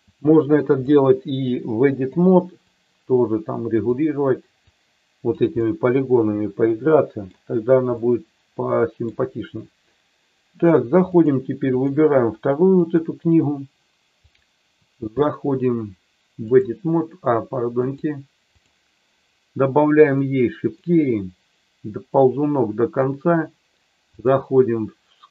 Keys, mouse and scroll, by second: 0.1 click, 1.4 click, 2.5-3.8 drag, 4.7 click, 5.5-7.3 middle drag, 7.9-9.0 middle drag, 11.3 click, 14.3-16.7 drag, 17.8 click, 20.1 click, 22.2 click, 24.1-25.3 drag.